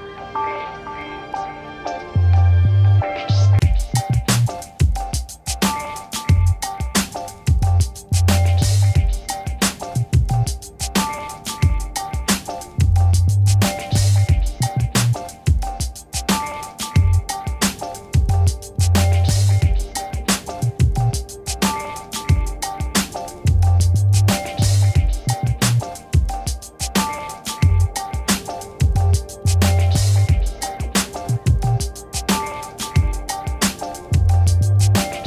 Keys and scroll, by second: 0.2 v, 6.8 ctrl+h, 19.4 ctrl+h, 23.4 ctrl+-, 30.6 ctrl++.